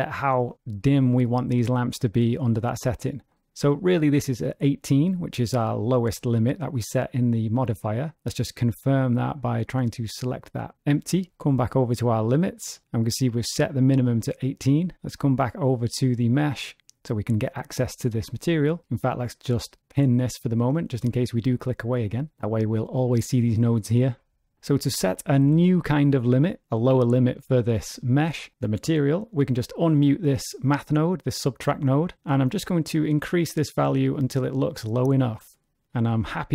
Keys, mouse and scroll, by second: 2.8 click, 8.1 click, 9.6 click, 11.3-11.6 scroll down 2, 12.2 click, 12.6-13.6 scroll down 5, 15.7 click, 19.6 click, 29.9 m, 30.8 click, 32.6 click, 36.1 click.